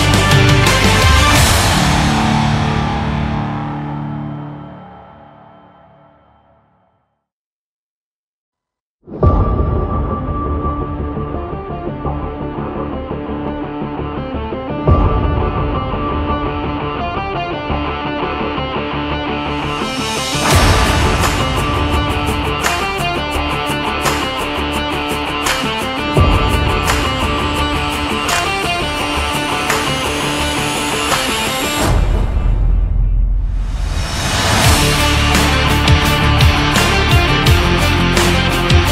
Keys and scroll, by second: 19.7 Right, 23.6 Up.